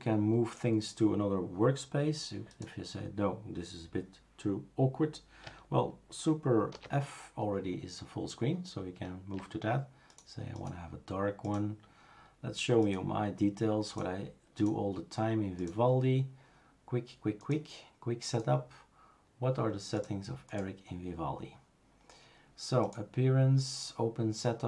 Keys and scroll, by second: 6.9 super+f.